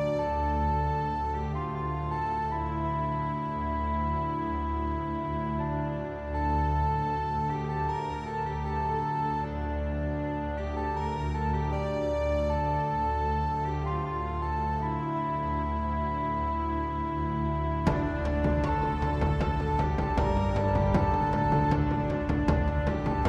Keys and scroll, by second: 12.9 super+z, 17.7 super+z.